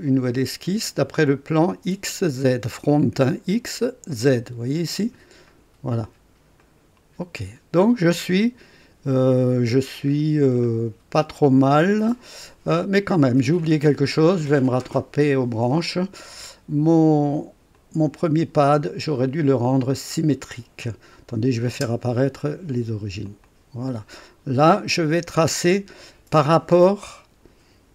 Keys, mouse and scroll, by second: 5.4 click, 6.6 click, 10.1 scroll up 1, 10.5 right click, 12.9 click, 14.6 click, 17.7 click, 19.0 click, 20.3 click, 21.3 click, 21.7 space, 23.2 click, 24.3-27.3 scroll up 2.